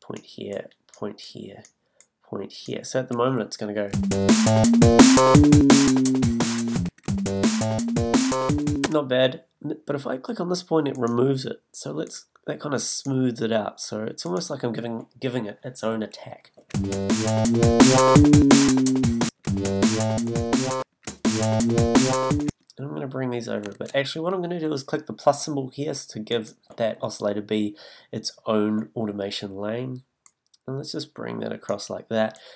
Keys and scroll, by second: 2.8 b, 6.8 space, 8.8 space, 16.7 space, 19.2 space, 20.8 space, 22.5 space.